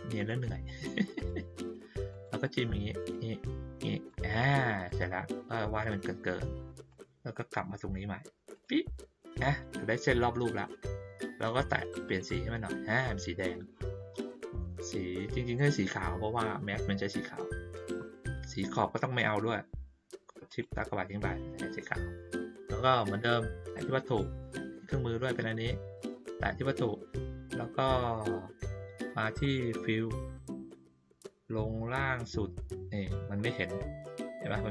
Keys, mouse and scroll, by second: 0.1 click, 1.1 click, 2.1 click, 3.0 click, 4.0 click, 4.8 click, 5.8 click, 6.9 click, 8.5 click, 12.0 click, 15.5 click, 20.4 shift+click, 24.2 click, 29.4 click, 32.0-33.0 scroll down 1, 33.0-33.4 scroll up 1.